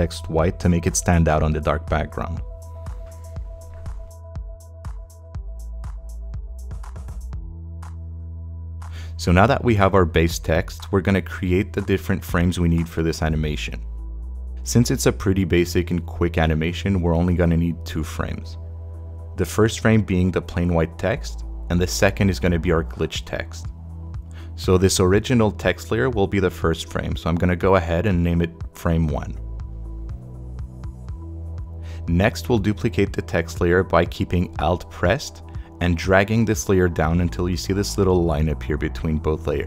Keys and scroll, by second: 28.8-30.9 typing.